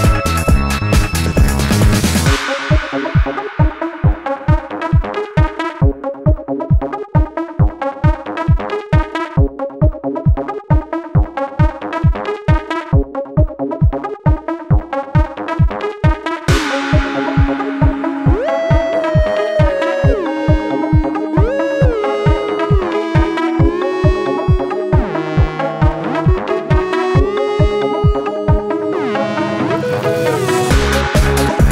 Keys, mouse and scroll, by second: 0.2 alt+scroll up 1, 5.2 shift+click, 9.9 ctrl+z, 14.6 alt+click, 20.9 shift+click, 23.3 ctrl+z, 31.1 alt+scroll down 1, 31.4 space.